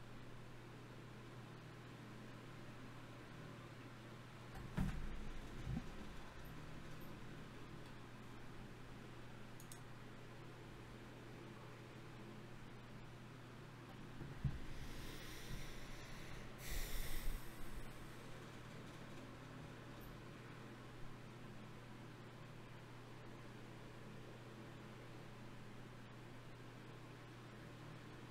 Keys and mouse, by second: 4.7 t, 6.3 shift+q, 11.0 ctrl+Up, 13.7 ctrl+Tab, 18.2 t, 19.4-22.2 drag, 22.2-26.7 middle drag, 26.7-28.3 drag.